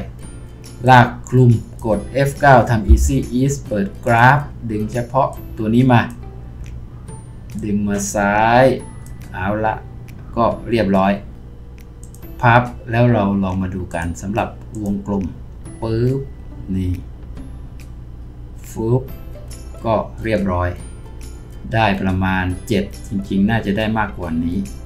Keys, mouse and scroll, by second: 2.9 F9.